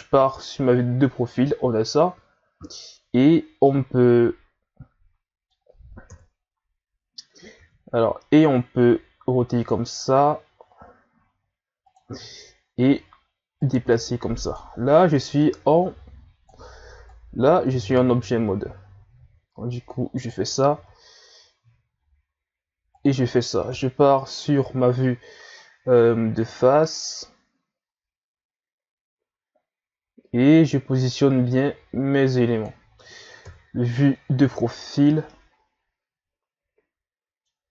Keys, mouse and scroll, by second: 3.7-6.0 middle drag, 6.0 KP_3, 7.6 r, 12.2-13.6 scroll up 3, 13.6-20.1 drag, 20.7 r, 23.7 KP_1, 26.0-29.0 drag, 33.4 KP_3, 35.3-37.7 middle drag.